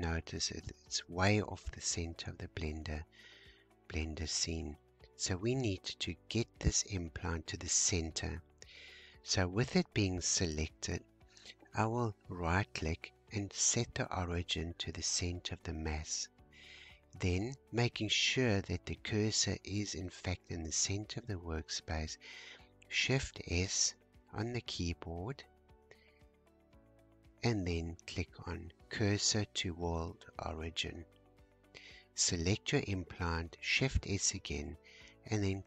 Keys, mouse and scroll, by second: 1.6-8.9 shift+middle drag, 8.9-10.1 scroll down 1, 10.1-10.6 scroll up 1, 10.6-12.0 scroll up 1, 12.0-15.1 right drag, 17.3 click, 18.4 shift+click, 20.0 shift+right click, 26.8 shift+s, 32.0 click, 33.3 shift+s.